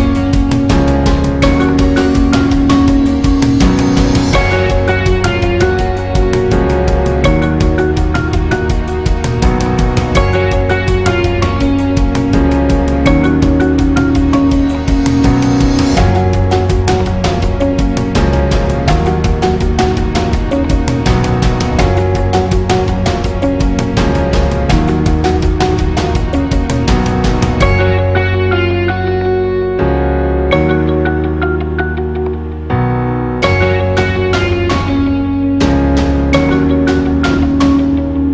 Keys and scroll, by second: 11.4 super+æ.